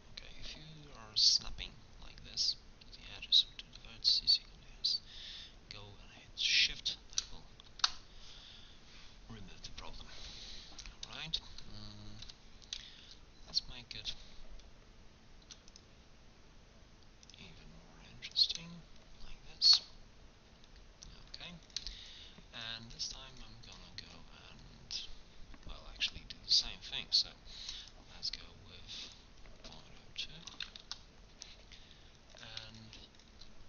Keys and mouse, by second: 9.3-10.3 middle drag, 12.3 k, 19.7-20.8 middle drag, 21.7 click, 22.3-24.7 middle drag, 24.7 click, 25.7 middle click, 26.1 i, 29.1-30.3 drag, 31.7 middle click.